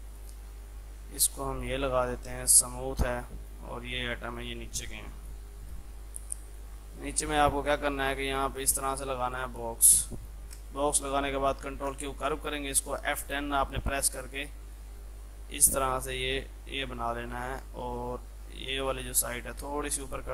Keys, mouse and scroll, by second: 0.1 click, 2.9 F3, 3.3-5.7 drag, 6.0 F2, 6.2-10.6 drag, 10.6 space, 11.8 ctrl+q, 13.1 F10, 13.8-20.3 drag.